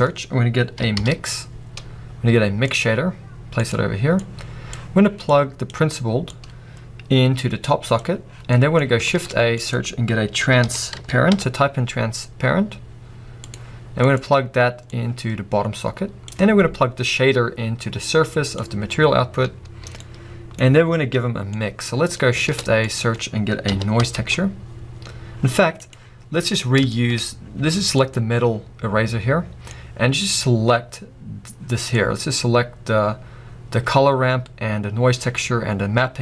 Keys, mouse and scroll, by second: 3.8-4.1 middle drag, 3.8-4.1 scroll up 1, 4.1 click, 5.2-10.1 drag, 10.1 shift+a, 16.3-20.7 drag, 20.7-21.9 middle drag, 20.7-22.1 scroll up 3, 26.0-26.5 middle drag, 26.0 scroll up 1, 26.2-26.5 scroll down 2, 27.0-28.2 shift+middle drag, 27.2-28.1 scroll up 2, 28.1 scroll up 1, 28.2 click.